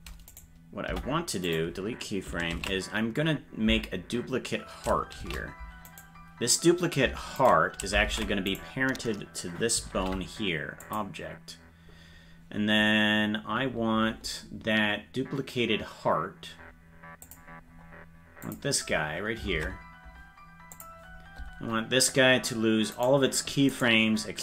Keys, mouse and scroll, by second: 0.3 right click, 0.9 Delete, 2.7 ctrl+s, 5.3 shift+d, 7.5 shift+right click, 8.1 ctrl+Tab, 8.6 right click, 10.0 ctrl+p, 17.2 click, 17.6-18.4 scroll down 1, 18.4 click, 18.4 scroll down 3, 19.5 ctrl+Tab, 20.7 click, 23.4 scroll down 1, 23.7 right click.